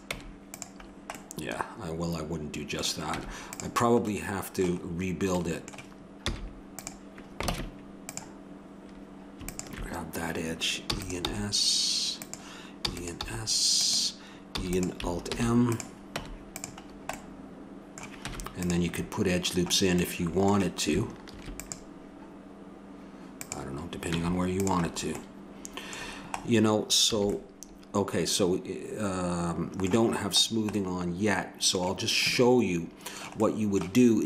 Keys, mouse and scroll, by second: 0.1 Tab, 0.8 middle click, 3.1 Tab, 3.4 click, 4.9 middle click, 6.3 x, 7.5 ctrl+Tab, 10.8 e, 11.4 s, 12.7 e, 13.2 s, 14.6 e, 15.3 alt+m, 16.2 Tab, 16.8 middle click, 18.2 Tab, 21.3 ctrl+r, 24.1 Tab, 25.2-26.9 middle drag, 27.1 a, 27.3 middle click, 30.5-31.6 middle drag.